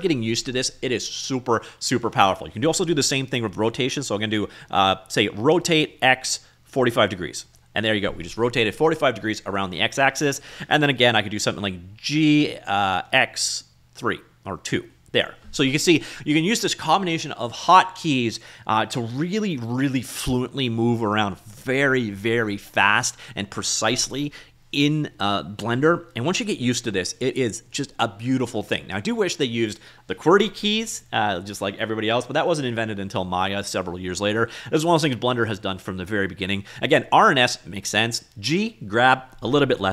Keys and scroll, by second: 5.6 r, 6.0 x, 6.8 4, 6.9 5, 7.6 Return, 12.3 g, 13.2 x, 13.7 2, 14.8 Return.